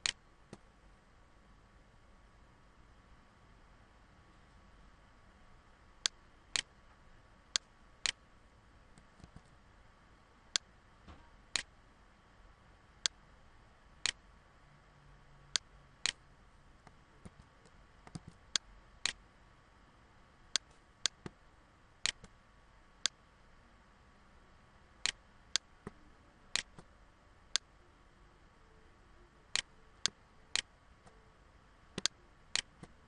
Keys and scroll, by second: 5.1 ctrl++, 8.7 ctrl+z, 16.8 ctrl+z.